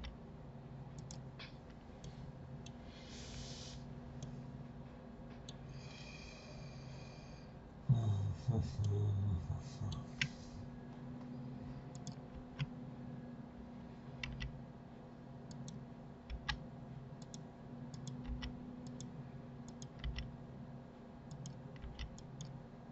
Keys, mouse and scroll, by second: 1.4 scroll up 2, 2.0 middle click, 2.7-4.2 scroll down 1, 4.2-7.2 middle drag, 8.2-8.8 scroll up 1, 8.8-10.4 shift+middle drag, 10.4-11.9 scroll up 2, 11.9 click, 14.2 g, 17.9 click, 18.2 g, 19.6 click, 20.0 g.